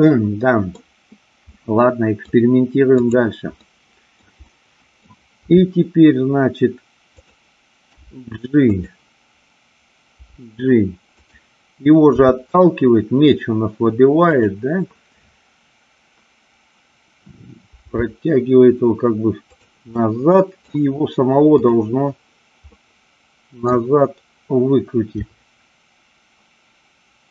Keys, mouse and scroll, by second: 0.0 middle click, 1.5 middle click, 2.8-4.0 drag, 4.0 middle click, 4.4 middle click, 5.4 r, 7.2 click, 7.8 g, 8.7 click, 12.1 r, 14.2 click, 17.8 g, 20.0-20.6 middle drag, 22.7-23.7 middle drag, 25.1 r.